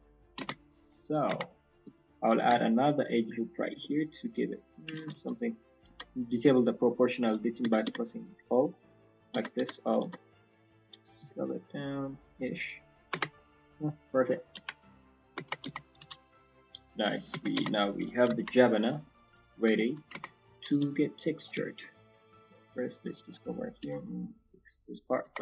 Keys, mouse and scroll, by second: 0.4 Tab, 0.6 scroll down 2, 0.8 middle click, 1.3 Tab, 1.4 middle click, 1.7 scroll up 2, 8.7 middle click, 9.1 o, 9.3 o, 11.2 s, 13.2 scroll down 1, 13.3 middle click, 14.0-14.9 scroll down 3, 14.5 KP_1, 14.9-15.4 scroll up 3, 15.3 Tab, 15.9 z, 16.2-16.7 scroll down 3, 16.4 middle click, 17.3 Tab, 17.8 Tab, 17.8 scroll up 2, 18.2 KP_1, 18.8-19.3 scroll down 3, 19.1 click, 19.4 scroll up 3, 19.7 shift+scroll down 1, 19.8 shift+middle click, 20.0-20.6 scroll up 3, 20.8 scroll, 21.6 shift+middle click, 21.6 scroll, 21.6 shift+Tab, 21.8 z, 22.0 click, 22.7 click, 25.2 Tab.